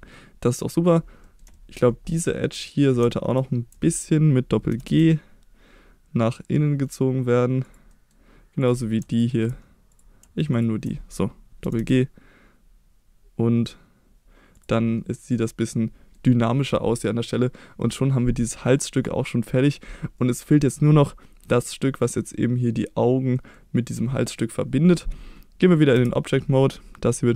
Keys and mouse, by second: 1.2 middle click, 1.5 shift+middle click, 2.1 middle click, 2.6 click, 3.8 middle click, 4.7 g, 4.9 g, 7.6 click, 7.9 middle click, 8.6 click, 9.1 ctrl+click, 10.5 shift+click, 10.9 middle click, 11.6 g, 11.8 g, 14.5 click, 15.4 middle click, 20.2 middle click, 22.1-23.5 middle drag, 25.9 Tab, 26.6 middle click.